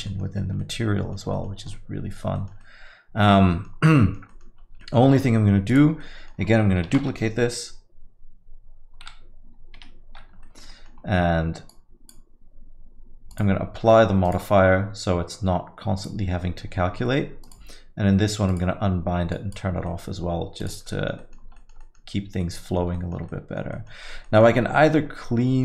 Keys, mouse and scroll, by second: 0.1 middle click, 0.4 scroll up 2, 0.6 alt+middle click, 1.4 middle click, 1.5 scroll down 1, 1.8 alt+middle click, 2.4 middle click, 2.6 alt+middle click, 3.5 middle click, 3.7 scroll down 2, 4.0 alt+middle click, 4.3 middle click, 4.6 scroll up 2, 4.8 alt+middle click, 5.7 click, 6.1 middle click, 8.4 shift+d, 9.9 Escape, 10.4 alt+middle click, 10.7 middle click, 11.0 scroll down 1, 12.2 click, 13.3 click, 14.3 click, 16.0 click, 17.4 click, 18.5 click, 19.3 click, 19.9 middle click, 20.6 click, 20.9 alt+middle click, 21.2 middle click, 21.4 scroll down 2, 21.6 alt+middle click, 21.8 middle click, 22.2 scroll up 2, 22.4 alt+middle click, 23.0 middle click, 23.3 alt+middle click, 23.7 middle click, 24.1 scroll up 2, 24.3 alt+middle click, 24.6 scroll down 3, 24.9 alt+middle click.